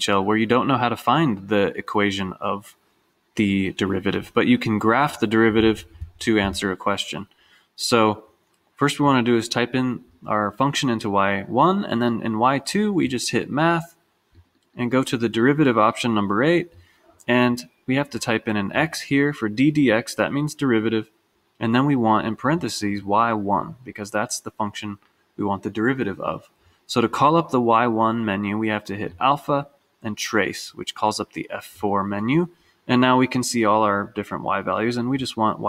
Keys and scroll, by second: 9.1 Down, 14.4 Down, 17.1 Return, 18.8 x.